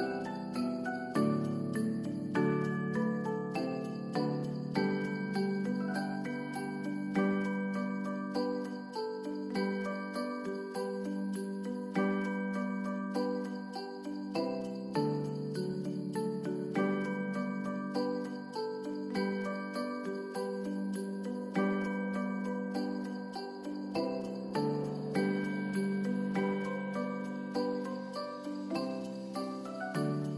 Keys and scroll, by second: 0.4 ctrl+s, 5.3 ctrl+shift+c, 6.4-8.1 typing, 10.1 Return, 10.7 ctrl+s, 14.3 ctrl+s, 17.8 n, 18.3 ctrl+shift+x, 18.9 ctrl+s, 21.7 ctrl+d, 26.7 ctrl+d.